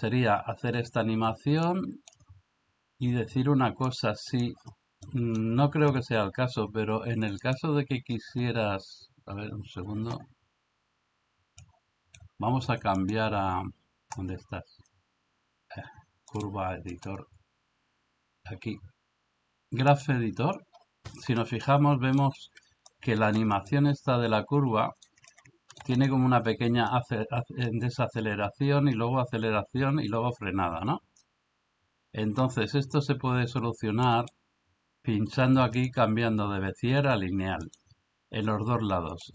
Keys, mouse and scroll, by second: 1.7-2.1 drag, 3.9-4.4 drag, 5.1 middle click, 7.5-9.4 drag, 11.6 click, 13.1-14.6 drag, 16.9-20.0 drag, 21.8 ctrl+middle click, 23.0 shift+middle click, 23.7-25.1 ctrl+middle drag, 25.4 ctrl+middle click, 35.7-37.7 drag.